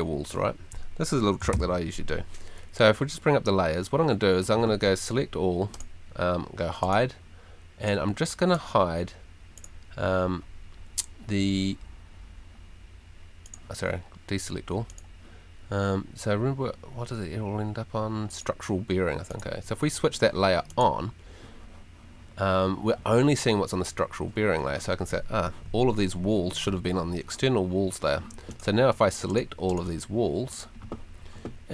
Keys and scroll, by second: 1.5 super+l.